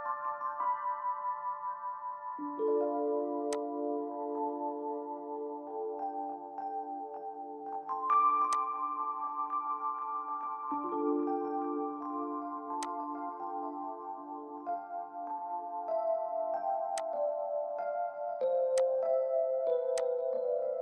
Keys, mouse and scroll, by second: 0.5-0.8 scroll up 1, 5.5 typing, 10.0-10.4 typing, 14.0-14.8 typing, 20.3 scroll up 1, 20.4 middle click.